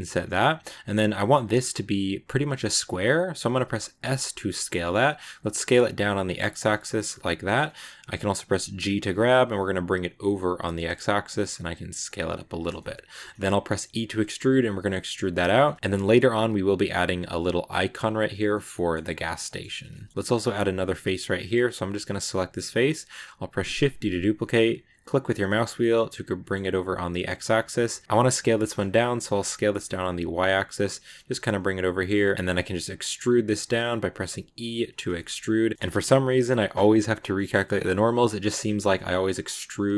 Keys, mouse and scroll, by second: 12.6 middle click, 13.0-13.6 scroll up 2, 13.6 e, 15.5-17.9 shift+middle drag, 17.9 scroll up 1, 18.0-18.4 scroll down 1, 18.4 middle click, 18.8-19.3 scroll down 2, 19.3 middle click, 19.5 Tab, 19.8 shift+middle click, 20.1-21.2 scroll up 2, 21.7 right click, 23.4 shift+d, 27.3 middle click, 27.6-28.0 scroll up 1, 28.0 s, 30.6 middle click, 31.1 g, 35.0 shift+scroll up 3, 35.1 shift+middle click, 35.6 middle click, 35.7 scroll up 1, 35.8-37.2 middle drag, 37.2 scroll up 1, 37.2 middle click, 38.0-38.3 scroll down 1, 38.3 right click, 38.5 shift+d, 39.3 e.